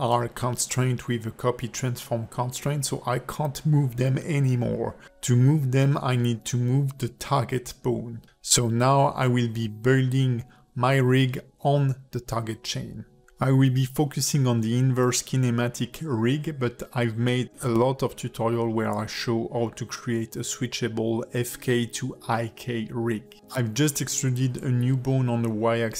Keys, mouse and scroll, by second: 0.2 click, 0.8 click, 1.4 r, 2.6 click, 3.9-4.3 scroll up 3, 4.5 ctrl+middle click, 5.7 click, 6.1 r, 6.7 click, 7.0 r, 8.1 click, 8.8 click, 9.2 click, 9.3 r, 10.2 click, 10.5 r, 11.4 click, 11.8 r, 16.2 shift+middle click, 17.0 click, 17.3 Tab, 17.7 click, 18.4 e, 20.6 click, 22.4 click, 23.3 click.